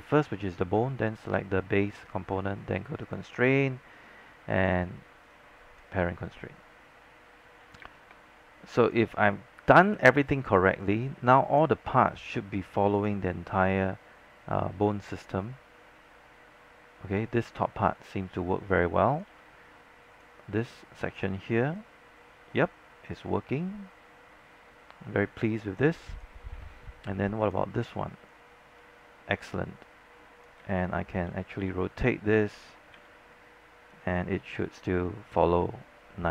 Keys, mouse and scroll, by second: 1.1-6.8 shift+drag, 7.2-7.6 scroll down 1, 7.9 space, 8.1 click, 9.7 scroll down 1, 10.1 alt+middle click, 10.4 alt+click, 11.2 scroll down 1, 11.3 alt+click, 12.2-19.3 alt+drag, 19.3 z, 20.2-26.0 drag, 26.0 click, 26.6 z, 27.5-30.7 drag, 30.7 z, 31.7 r, 33.1 e, 34.0-36.3 drag.